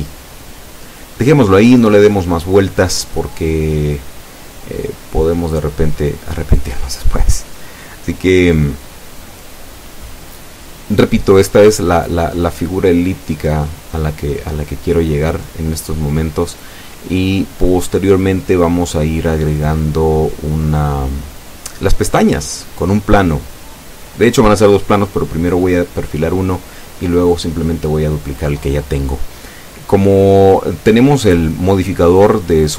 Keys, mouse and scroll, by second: 0.2 scroll up 2, 1.2 right click, 2.3 shift+right click, 3.7 s, 7.3 click, 7.8 Tab, 11.2 Tab, 15.0-18.5 drag, 19.3 ctrl+z, 20.1 ctrl+z, 21.1-22.3 ctrl+drag, 23.4 Tab, 26.6 scroll down 2, 26.9 Tab, 27.7 a, 28.8-29.2 scroll down 2, 30.3 shift+a, 31.2 click.